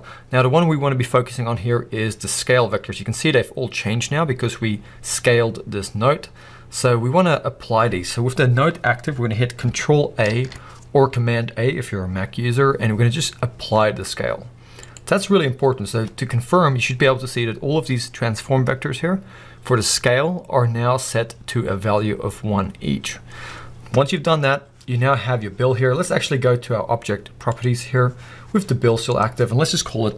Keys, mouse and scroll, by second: 17.2-25.1 middle drag, 25.1 scroll down 3.